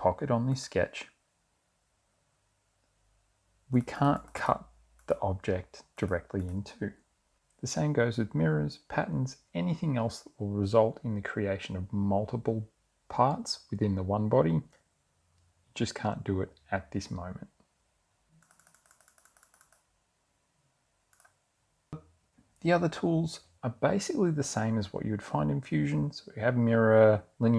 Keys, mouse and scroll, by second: 0.8 click, 4.0 click, 5.2 click, 6.2 click, 6.6 click, 18.7 click, 21.4 click.